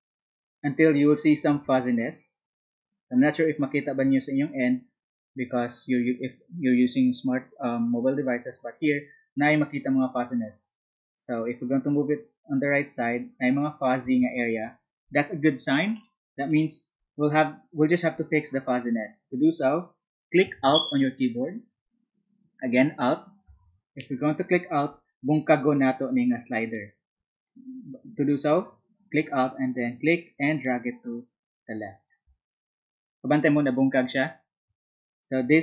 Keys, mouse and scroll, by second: 11.2-14.6 drag, 27.4-32.0 alt+drag.